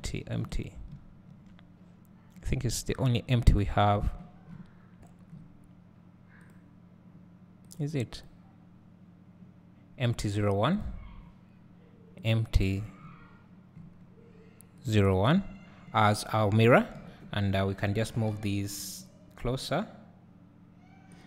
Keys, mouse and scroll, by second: 0.0 click, 0.8 right click, 1.1 `, 6.6-7.8 drag, 10.8 click, 14.9-21.2 drag, 15.4 `, 17.0 KP_1, 18.1 g.